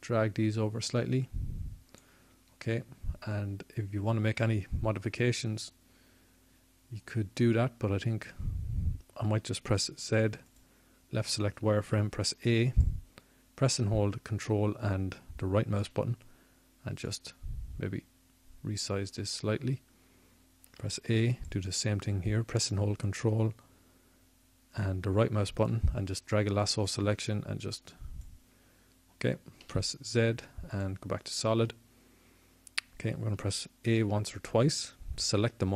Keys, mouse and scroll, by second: 1.5 ., 4.1-6.0 drag, 7.7-11.1 middle drag, 12.4-13.4 middle drag, 14.0 middle click, 14.9 z, 17.2 a, 18.0-20.3 drag, 22.3-24.2 drag, 26.0 a, 33.4-35.7 drag, 34.8 z.